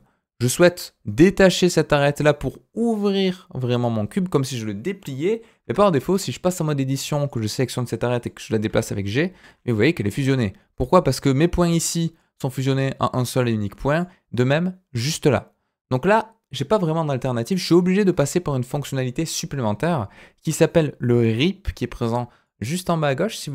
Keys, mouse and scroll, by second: 5.6 Tab, 7.2 click, 8.0 middle click, 8.6 g, 10.9-12.2 drag, 13.6 click, 22.4-23.5 drag.